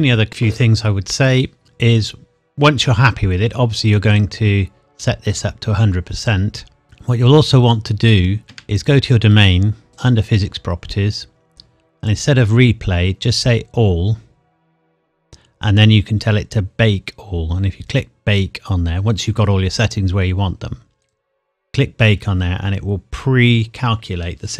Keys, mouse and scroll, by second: 4.1 click, 8.5 Escape, 8.7 click, 9.4-9.9 scroll down 1, 9.9 click, 10.5-12.0 scroll down 1, 12.0 click, 15.4 scroll down 1, 21.1 click.